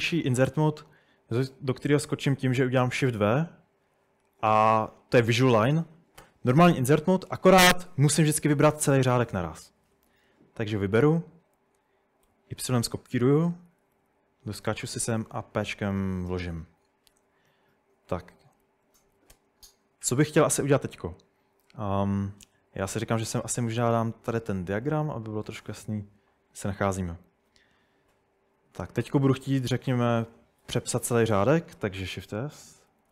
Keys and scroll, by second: 3.0 typing, 8.0-10.3 typing, 12.0-15.5 typing, 16.9-17.6 typing, 19.0 typing, 19.3 Return, 21.5-22.2 typing, 30.6 shift+s, 32.4-33.1 typing.